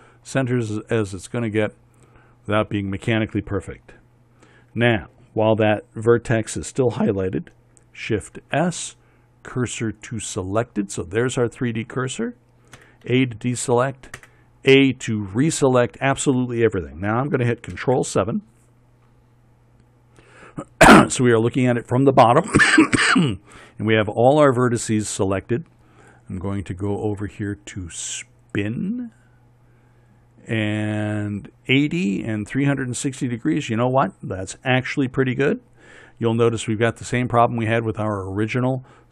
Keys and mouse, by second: 8.8 shift+s, 13.3 a, 14.7 a, 18.3 ctrl+KP_7, 21.8-29.1 middle drag, 29.1-31.5 drag.